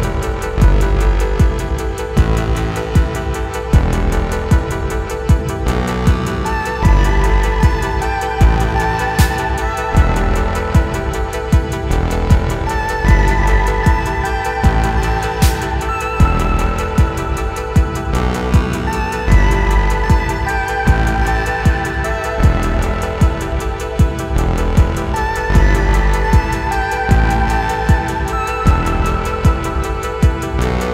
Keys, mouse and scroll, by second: 0.0-1.3 typing, 0.1 shift+click, 0.6 middle click, 1.0 middle click, 1.2 middle click, 1.7 middle click, 1.9 middle click, 2.0 shift+click, 2.1 middle click, 2.3 shift+click, 2.8 KP_3, 2.8 shift+middle click, 2.9 s, 3.2 click, 3.8 click, 4.1 middle click, 4.2-22.4 typing, 4.3 shift+click, 4.7 shift+click, 5.7 shift+middle click, 6.1 click, 7.4 shift+middle click, 8.5 shift+middle click, 8.5 scroll down 2, 10.1 shift+middle click, 11.0 shift+middle click, 11.4 shift+middle click, 12.0 shift+middle click, 12.4 click, 12.7 shift+click, 13.3 shift+middle click, 13.4 scroll up 1, 13.7 shift+middle click, 14.3 click, 14.7 middle click, 14.9 shift+click, 15.1 middle click, 15.3 middle click, 15.4 click, 15.7 ctrl+z, 16.1 click, 16.2 middle click, 17.1 click, 17.1 middle click, 17.3 click, 19.4 click, 20.1 shift+middle click, 20.7 shift+click, 20.8 alt+m, 21.0 shift+middle click, 21.6 shift+middle click, 21.8 click, 22.3 shift+middle click, 22.6 shift+middle click, 22.7 scroll up 1, 22.8 shift+click, 22.9 alt+n, 23.2 alt+m, 23.3 shift+middle click, 23.4 click, 23.5-30.9 typing, 23.6 click, 24.3 click, 25.1 click, 25.5 click, 25.8 shift+middle click, 26.2 click, 26.2 middle click, 26.5 middle click, 26.8 middle click, 27.0 shift+click, 27.3 middle click, 27.5 middle click, 28.7 middle click, 29.0 shift+middle click, 29.0 scroll up 3, 29.2 shift+middle click, 29.4 click, 29.8 shift+middle click, 30.1 shift+middle click, 30.3 middle click, 30.8 scroll down 2.